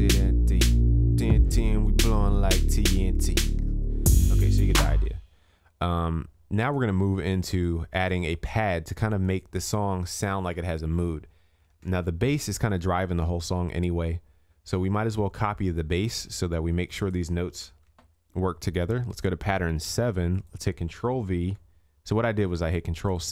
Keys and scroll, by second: 11.7 ctrl+s, 17.7 ctrl+c, 21.4 ctrl+v.